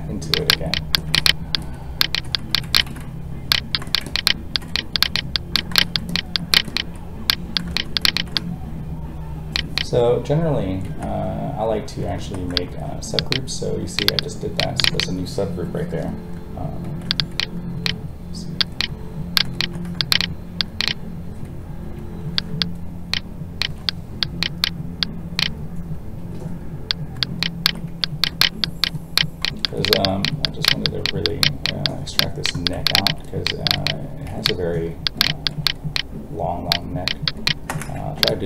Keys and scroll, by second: 10.8 ctrl+w, 17.7 alt+a, 37.9 ctrl+z.